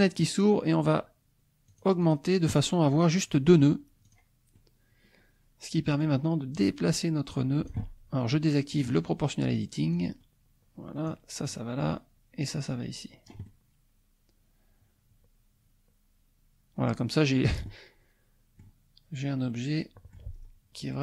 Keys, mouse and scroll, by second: 1.7 click, 4.0 click, 4.5-6.2 middle drag, 6.6-7.9 drag, 8.7 click, 10.0-11.3 drag, 11.4 click, 12.4-18.8 drag, 19.5 click, 20.3-21.0 scroll down 2.